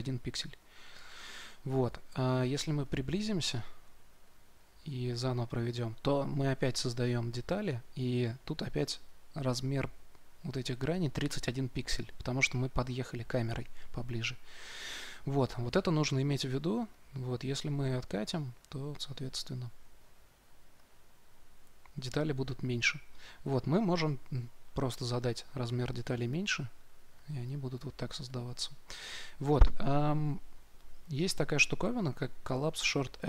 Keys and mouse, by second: 18.5-33.2 drag.